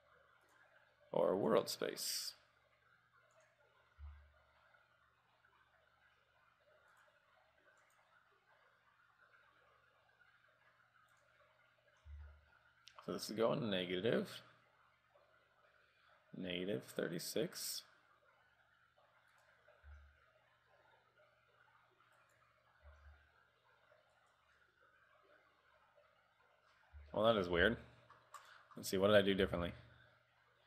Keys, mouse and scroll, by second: 1.6 click, 4.1 r, 8.0 click, 12.3 r, 20.2 r, 23.1 r, 27.3 shift+middle click, 27.7 r, 29.0 right click, 29.7 r.